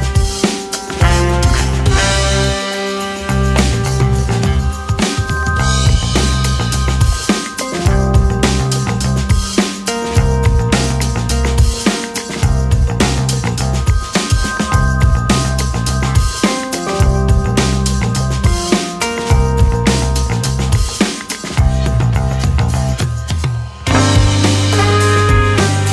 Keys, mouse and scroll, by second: 1.2 right click, 1.5 shift+middle click, 2.3-3.5 scroll up 1, 3.5 2, 4.4 click, 5.8 click, 6.2 c, 10.3 right click, 12.3-15.2 drag, 15.2-17.2 middle drag, 17.2 a, 18.5 e, 21.2 ctrl+r, 24.6-25.9 middle drag.